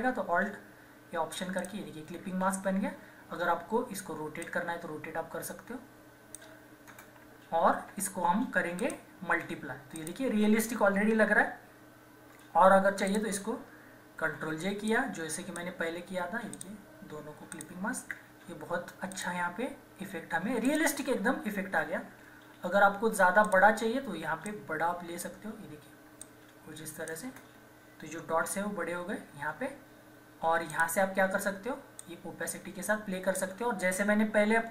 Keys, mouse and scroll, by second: 1.3 typing, 1.6 alt+click, 4.5-6.9 drag, 6.9 Return, 7.4 ctrl+=, 8.8 click, 10.4 typing, 13.0 click, 13.0 typing, 14.2 ctrl+j, 14.9-16.6 drag, 22.5 ctrl+-, 23.4-27.2 drag, 27.2 Return, 28.5 ctrl+=, 30.7-34.7 drag.